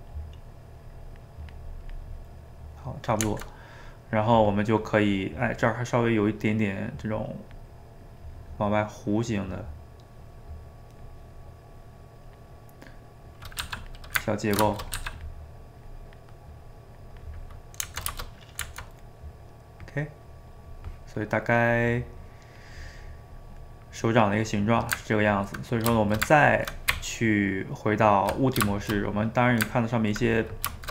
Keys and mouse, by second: 0.4-2.2 drag, 2.2-4.2 middle drag, 4.2 click, 4.6 middle click, 5.1 click, 5.7-7.1 middle drag, 7.1-9.0 drag, 9.0-10.7 middle drag, 10.7 click, 11.2 middle click, 11.8 click, 12.6-13.6 middle drag, 13.6 f, 14.2 ctrl+middle click, 15.0 f, 15.5 middle click, 15.8-17.4 drag, 17.4-20.3 middle drag, 20.3 click, 20.8 middle click, 21.5-23.3 drag, 23.3 middle click, 24.0 click, 24.7-26.9 middle drag, 26.9 Tab, 28.7-30.9 shift+middle drag.